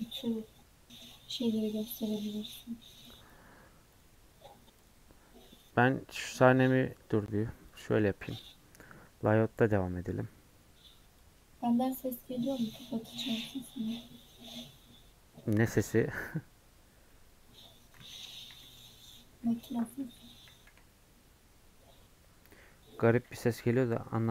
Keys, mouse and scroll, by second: 17.1-18.4 middle drag, 18.4 KP_1, 18.9 scroll up 1, 19.8 scroll up 4, 19.9-23.7 shift+middle drag.